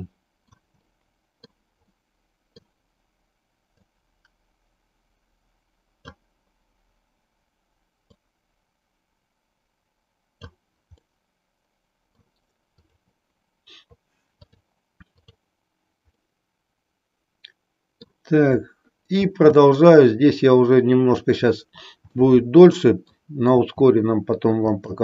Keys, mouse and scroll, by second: 1.0 middle click, 1.9 middle click, 3.6-6.1 drag, 8.3-10.6 drag, 11.0-12.3 middle drag, 12.9 click, 14.4 click, 15.2 click, 16.2-18.3 middle drag, 19.3 shift+d, 21.2 click, 22.1-23.3 middle drag, 23.6 r.